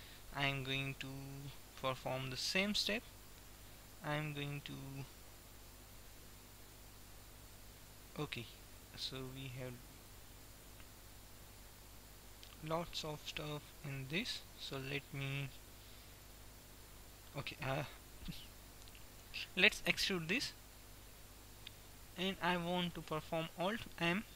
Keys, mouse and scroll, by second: 1.2 middle click, 1.7 Tab, 3.2-4.7 right drag, 3.5 Tab, 4.7 middle click, 6.8-13.5 middle drag, 19.8 e, 23.7 ctrl+m.